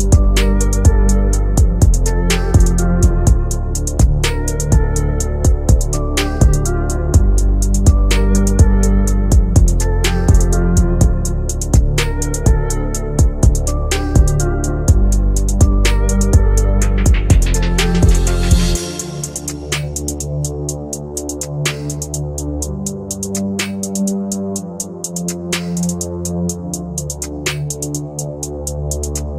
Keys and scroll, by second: 7.6 c, 9.4 shift+Page_Down, 11.1 c.